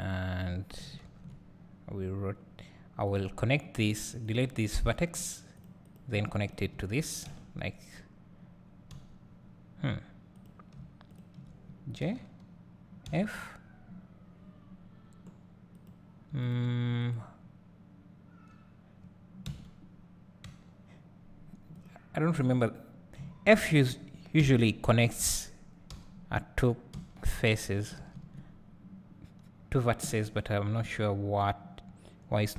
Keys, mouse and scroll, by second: 0.0 click, 1.0 ctrl+l, 3.1-4.3 drag, 4.9 x, 5.8 click, 6.5 shift+click, 10.3 click, 11.1 shift+click, 14.9-15.7 scroll down 1, 15.7 click, 21.7 click, 22.4 click, 23.5 shift+click, 26.9 e, 27.9 right click, 28.0 ctrl+z.